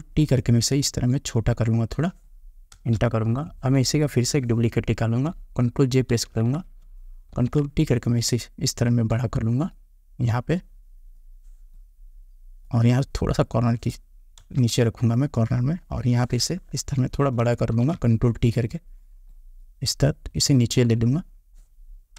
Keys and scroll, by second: 2.9 Return, 14.6 Return.